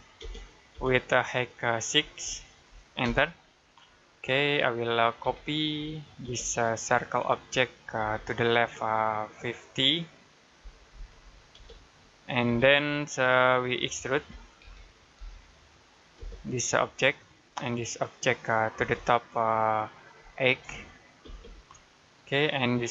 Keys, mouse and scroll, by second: 0.0 space, 2.1-2.9 typing, 3.6 middle click, 4.0 scroll up 1, 5.1-6.1 typing, 7.2 click, 7.8 space, 8.1 click, 10.4-11.4 typing, 12.8 middle click, 14.2 typing, 17.1 click, 18.6 space, 20.4 8, 21.1 space.